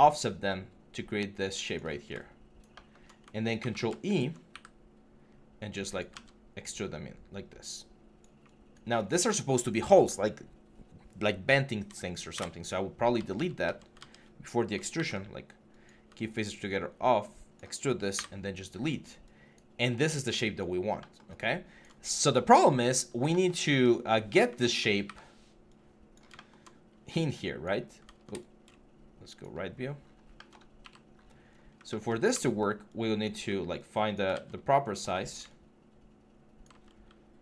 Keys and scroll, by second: 3.4 ctrl+e, 4.3 ctrl+e, 5.9 ctrl+z, 12.1 Delete, 13.0 ctrl+z, 14.7 ctrl+e, 17.9 Delete, 24.8 w, 28.1 r, 30.6 f, 32.1 w, 34.1 ctrl+z, 35.2-37.1 typing.